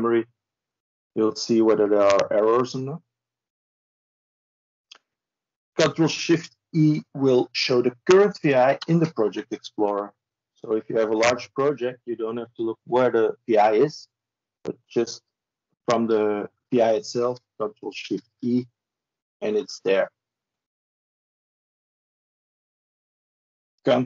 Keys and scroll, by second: 8.6 ctrl+shift+e, 17.7 ctrl+shift+e.